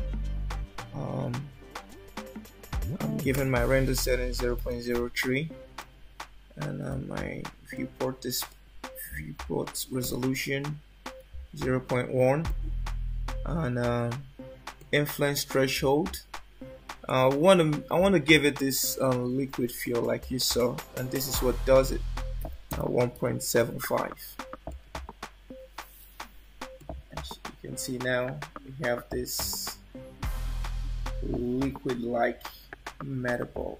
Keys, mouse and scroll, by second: 7.0 click, 14.9 click, 26.9 click.